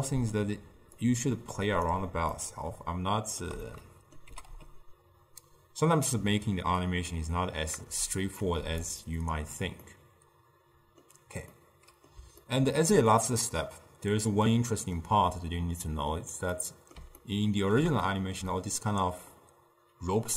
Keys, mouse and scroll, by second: 1.2 click, 1.9 click, 2.4-4.4 shift+middle drag, 4.4 g, 8.3 click, 9.9-16.3 middle drag, 16.6-20.3 middle drag.